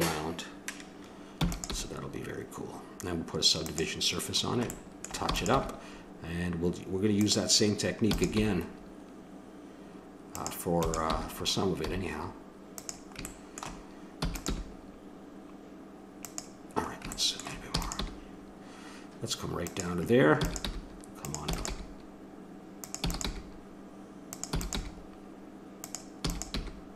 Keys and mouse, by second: 1.4 e, 1.7 g, 5.3 e, 5.6 g, 8.1 e, 8.4 g, 10.8-12.8 drag, 10.8 e, 14.3 e, 14.5 g, 15.7 click, 16.9 middle click, 17.8 e, 18.0 g, 20.3 e, 20.7 g, 21.5 e, 21.7 g, 23.0 e, 23.3 g, 24.5 e, 24.7 g, 26.2 e, 26.6 g.